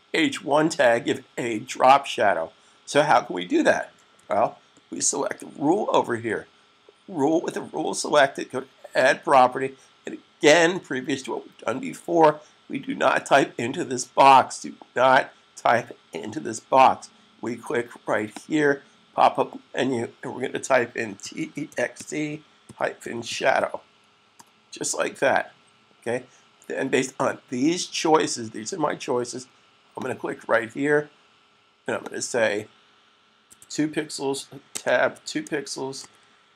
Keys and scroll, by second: 4.0 super+s, 20.8-23.6 typing, 33.4 2, 35.0-36.5 typing.